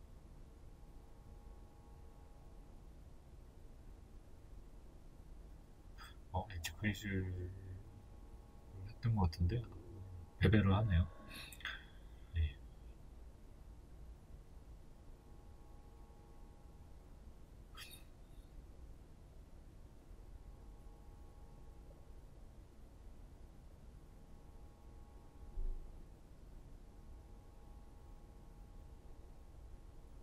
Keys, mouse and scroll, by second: 0.7 ctrl+b, 8.5 middle click, 8.9 Tab, 9.3 middle click, 11.0 w, 11.5 scroll down 1, 12.6-30.2 middle drag, 13.0-14.0 scroll down 2, 14.0 KP_1, 15.0-15.4 scroll up 2, 30.1 KP_1.